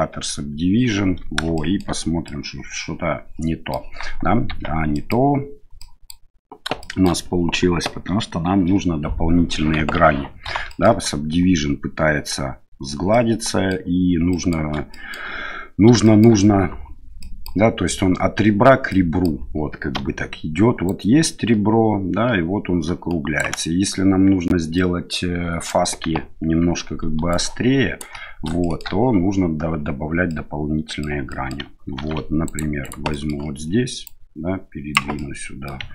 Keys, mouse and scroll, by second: 1.5 shift+middle drag, 2.2-3.7 middle drag, 4.4 Tab, 4.9 middle click, 5.7 middle click, 6.8 shift+middle click, 9.7 KP_1, 10.6 shift+middle click, 13.1 middle click, 14.3 middle click, 14.9 shift+middle click, 16.0 shift+middle click, 17.2 middle click, 18.9 middle click, 19.9-20.8 d, 20.8-23.5 drag, 23.4 d, 23.5 d, 24.7 middle click, 27.1-28.1 d, 27.3 right click, 28.6 shift+middle click, 30.3 middle click, 31.3 middle click, 31.9 ctrl+r, 33.2 middle click, 34.1 click, 35.2 middle click.